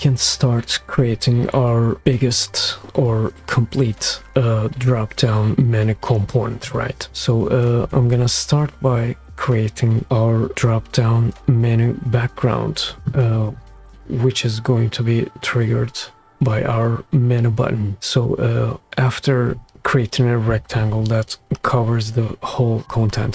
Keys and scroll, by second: 7.9 r.